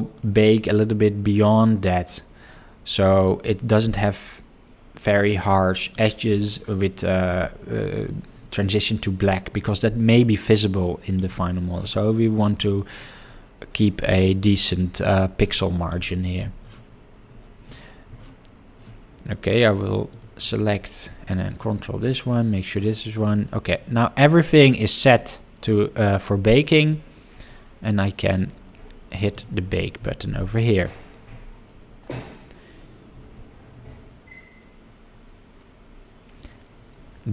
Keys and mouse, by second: 0.2 middle drag, 19.2 Tab, 20.1 click, 21.4 ctrl+click.